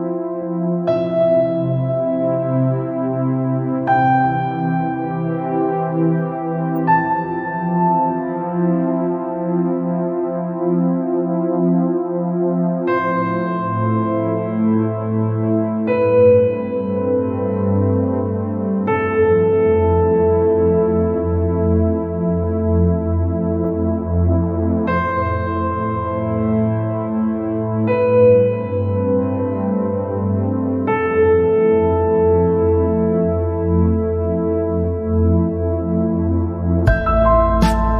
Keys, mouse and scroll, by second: 0.6 shift+d, 4.4 scroll down 3, 4.6 middle click, 5.1-5.6 scroll up 3, 6.4 shift+d, 10.4-10.8 scroll down 2, 10.8 scroll up 2, 11.8 shift+d, 15.2 scroll down 1, 15.3 middle click, 16.0-16.4 scroll down 3, 16.4 scroll up 2, 17.0 scroll up 3, 17.8 scroll down 3, 17.9-21.1 middle drag, 21.1 scroll down 2, 21.4 middle click, 22.0-22.9 scroll up 7, 23.8 shift+d, 27.2 scroll down 4, 27.5 scroll up 3, 28.5 shift+d, 32.7 scroll down 3, 32.9 middle click, 33.4 scroll down 3, 33.6 middle click, 34.3 scroll up 3, 35.2 scroll down 3, 35.3-36.7 middle drag, 36.7 KP_7.